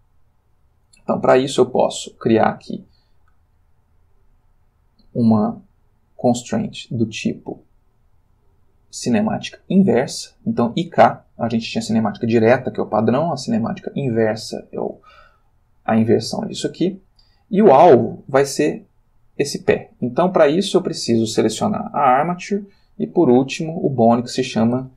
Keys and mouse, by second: 0.7 click, 2.0 click, 14.1 click, 20.5 click, 22.0 click, 23.8 click.